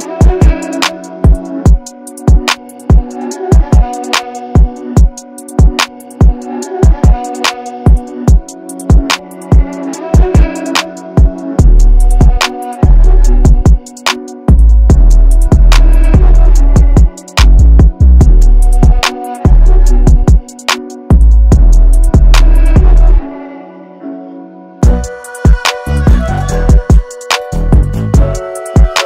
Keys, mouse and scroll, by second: 13.4 space, 13.5 click, 14.3 alt+scroll up 1, 14.7 space, 14.8 click, 17.1 click, 24.6 alt+scroll down 1, 24.9 space, 25.1 click, 25.7 alt+scroll up 1, 26.1 space, 26.2 click.